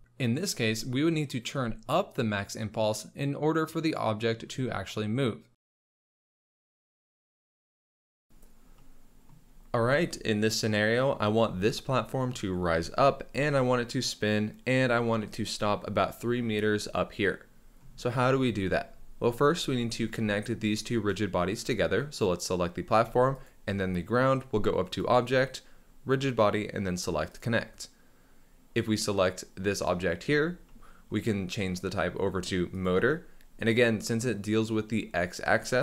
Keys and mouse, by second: 0.1-1.4 drag, 3.7 click, 23.4 shift+click, 25.0-27.4 drag, 31.9-32.8 drag.